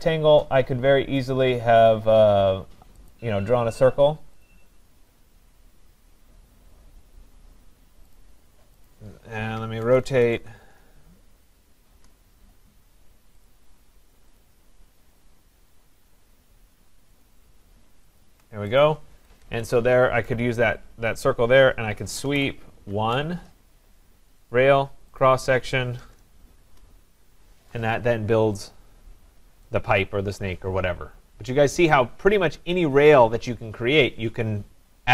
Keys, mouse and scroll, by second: 3.1 click, 4.5 click, 8.9 click, 9.6-10.9 typing, 11.9 Return, 13.5 click, 14.4 click, 17.2 click, 18.2 shift+click, 18.8 click, 19.1 Escape, 19.4 Escape, 20.3 right click, 20.5-21.1 scroll down 2, 21.1-21.5 scroll down 2, 21.7-22.8 typing, 23.0 Return, 24.5 click, 25.2 click, 25.2 scroll, 25.2 typing, 26.0 Return, 26.6 Return, 28.6 click, 29.2-29.7 scroll, 31.5 right click.